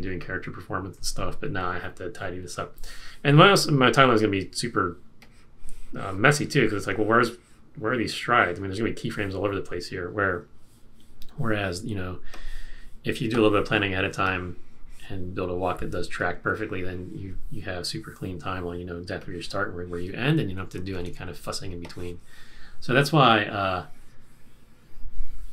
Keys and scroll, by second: 20.7 super+=, 20.9 super+-, 20.9 super+=, 21.1 super+-.